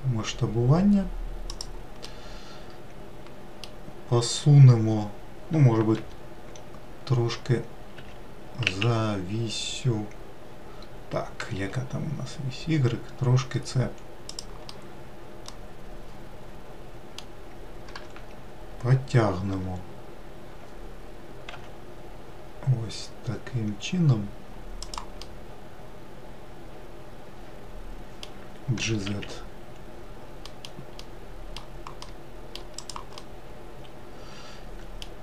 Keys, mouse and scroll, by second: 0.5 s, 2.9-6.0 middle drag, 6.9 r, 15.6-18.8 middle drag, 18.8 g, 26.1-29.1 middle drag, 29.7 g, 34.1-35.2 middle drag.